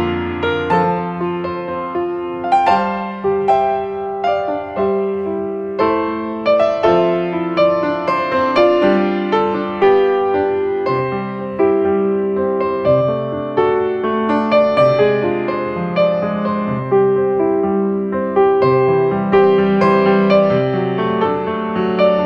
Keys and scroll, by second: 3.7 ctrl+space, 9.7 space, 11.9 ctrl+space, 17.8 ctrl+space, 19.3 ctrl+space, 21.4 space.